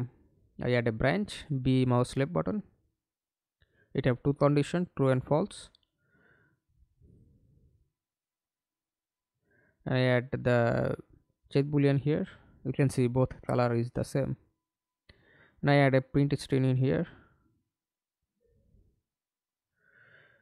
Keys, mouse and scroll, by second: 0.1 Return, 7.3 double click, 12.0 right click, 13.7-15.2 typing, 18.3-20.1 typing.